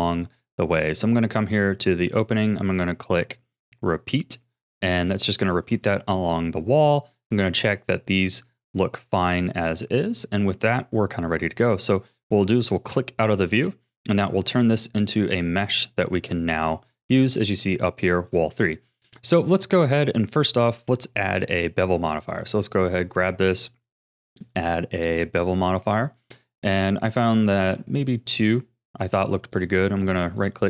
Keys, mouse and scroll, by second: 3.6 click, 4.7 middle click, 5.4 scroll down 2, 5.8-11.7 shift+middle drag, 12.5 click, 13.4-14.5 scroll down 2, 14.5 ctrl+s, 15.2-18.2 middle drag, 18.3 middle click, 19.0-19.5 scroll up 3, 19.5-20.4 middle drag, 20.4-20.9 scroll up 2, 20.9-22.1 middle drag, 22.1 click, 23.5 click, 24.5-28.5 drag, 28.5 middle click, 29.5-30.6 right drag.